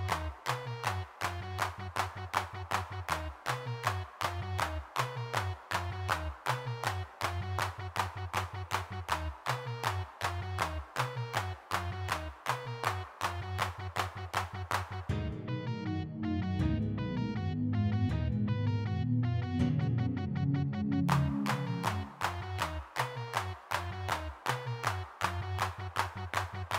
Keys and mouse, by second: 0.6 middle click, 0.7 middle click, 1.0-3.9 middle drag, 3.9-5.0 drag, 5.0 middle click, 5.8 middle click, 6.6 middle click, 9.4 f, 11.6 3, 12.9 middle click, 13.3 shift+c, 14.6 middle click, 15.1 3, 15.6 click, 17.2 f, 17.4-19.4 drag, 19.4 middle click, 19.8 middle click, 19.8 click, 20.4-23.4 middle drag, 23.9-26.7 drag.